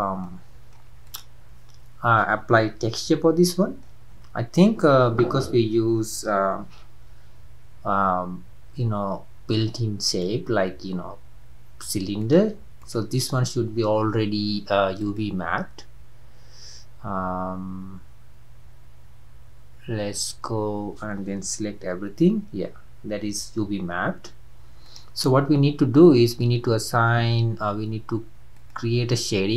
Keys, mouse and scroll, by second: 0.2-1.0 middle drag, 1.0 click, 3.0-6.1 shift+middle drag, 10.1-12.4 drag, 12.8 drag, 15.2 drag.